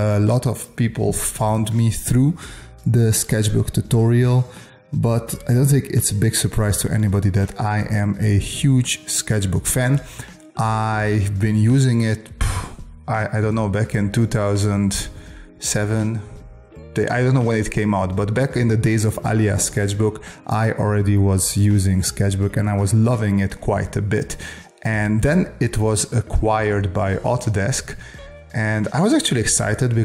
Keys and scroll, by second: 3.7 space, 4.7 space.